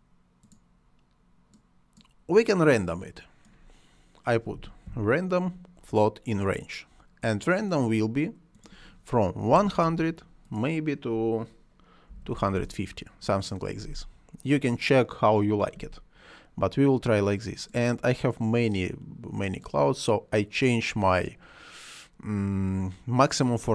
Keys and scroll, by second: 4.1-5.3 typing, 9.5 1, 12.1 2, 12.5 Return.